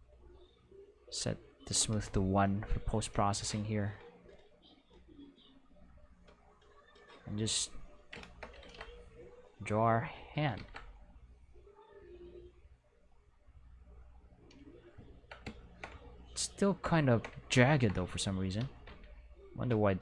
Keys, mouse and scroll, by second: 0.2 click, 0.5 click, 1.6 click, 1.8 1, 1.9 click, 4.0-7.1 drag, 8.6 ctrl+z, 9.7 click, 10.6 ctrl+z, 11.4-14.2 drag, 18.0 Tab, 18.9 q, 19.7 a.